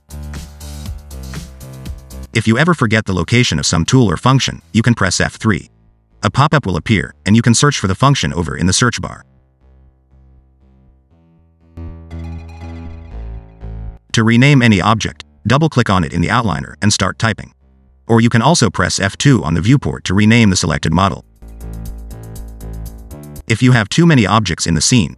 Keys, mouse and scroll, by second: 5.4 F3, 9.0 d, 10.9 g, 14.9 click, 15.0 click, 19.6 F2, 23.3 shift+d, 24.9 shift+d.